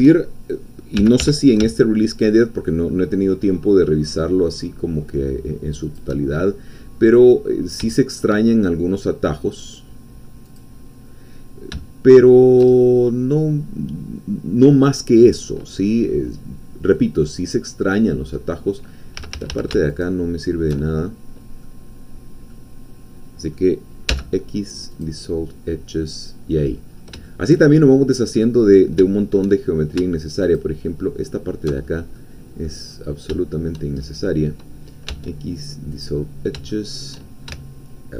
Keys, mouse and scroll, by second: 1.0 g, 1.3 y, 5.8 shift+click, 6.4 shift+scroll down 2, 6.8 middle click, 7.6-7.9 scroll up 2, 7.9-9.7 shift+middle drag, 10.6-11.7 drag, 11.8-16.0 shift+middle drag, 16.0-16.9 scroll down 1, 16.9 scroll down 1, 17.0-18.3 middle drag, 18.3 scroll down 1, 18.5 scroll up 1, 19.2 a, 20.0 alt+shift+click, 21.0 alt+shift+middle click, 22.1 scroll down 2, 22.5-24.1 middle drag, 24.1 x, 24.9 click, 25.6-26.0 scroll down 1, 26.0 middle click, 26.9-27.2 scroll down 1, 27.2 shift+middle click, 28.1 middle click, 28.6-29.0 scroll up 1, 29.1 shift+middle click, 30.4 alt+shift+click, 31.8-32.1 alt+shift+scroll down 1, 32.2 click, 33.4 shift+click, 34.0-35.1 shift+scroll up 1, 35.1 x, 35.9 click, 36.7 shift+middle click.